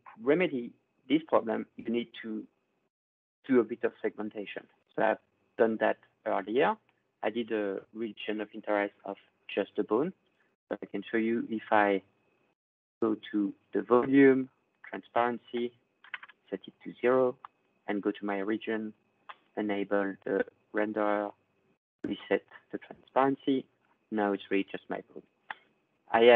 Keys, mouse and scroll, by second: 1.3 click, 4.6 click, 5.5 click, 6.4 click, 7.3 click, 10.6 click, 14.6 click, 15.3 click, 15.8 typing, 16.0 Return, 17.4 click, 20.0 click, 21.8 click, 25.4 right click, 26.3 ctrl+scroll.